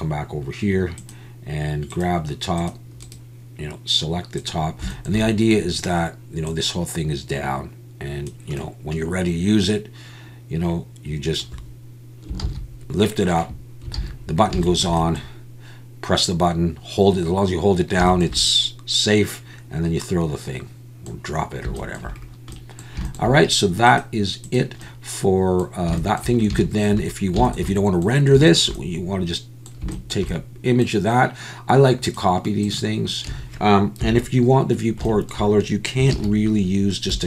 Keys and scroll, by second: 12.4 ctrl+z, 14.0 alt+a, 33.3 a, 34.0 KP_1, 36.1 shift+a.